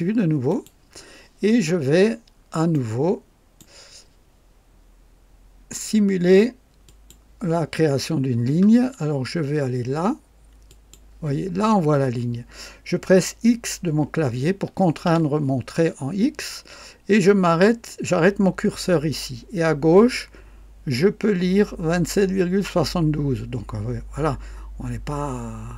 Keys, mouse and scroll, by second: 0.4 click, 2.0-2.4 scroll up 2, 2.7-3.7 right drag, 6.8 click, 10.7 click, 15.0 x.